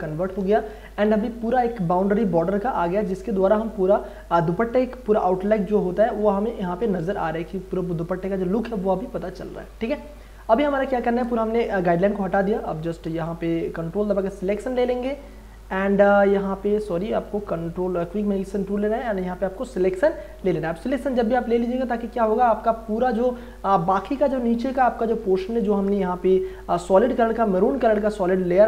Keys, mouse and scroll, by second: 0.7 ctrl+e, 6.8 alt+v, 7.1 d, 12.5 click, 13.1 w, 14.1 click, 17.3 right click, 17.9 click, 23.7 click, 25.2 i, 26.1 space, 26.3 ctrl+click, 27.2-28.6 drag.